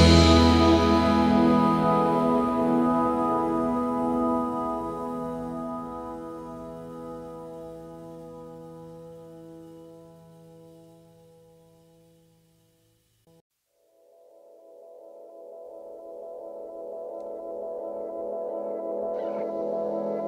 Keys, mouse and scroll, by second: 1.0-1.8 typing, 1.5 double click, 1.8 alt+scroll down 1, 4.1 alt+scroll up 1, 5.4 typing, 7.1-7.9 typing, 9.4 double click, 10.5-11.1 alt+scroll down 2, 11.2-11.8 alt+scroll down 1, 11.2 space, 12.0 alt+scroll down 1, 12.3 space, 12.7 space, 14.0 typing, 17.0 double click, 17.4 double click, 18.2 double click, 18.9 alt+scroll up 3, 19.2-20.2 typing.